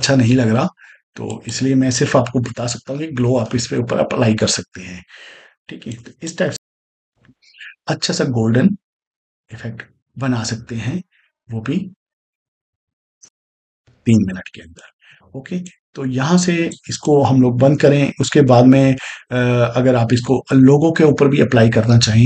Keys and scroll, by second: 2.9 Delete, 6.5 space, 13.1 space, 14.8 space.